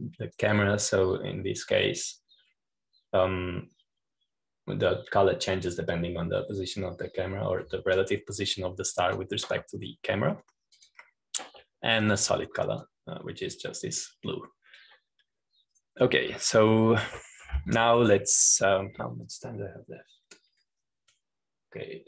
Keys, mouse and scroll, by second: 1.6-14.0 drag, 14.0-16.3 drag, 17.7 click.